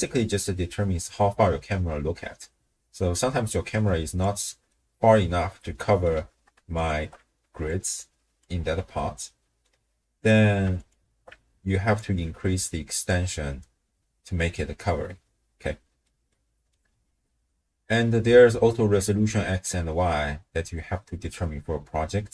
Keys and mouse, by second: 4.7-6.2 middle drag, 6.7 alt+shift+click, 7.4 d, 7.7 click, 8.5 d, 8.6 d, 9.3 middle click, 10.8 alt+shift+click, 12.0-13.1 drag, 16.0 middle click, 17.5 middle click, 17.8 click, 17.8 right click.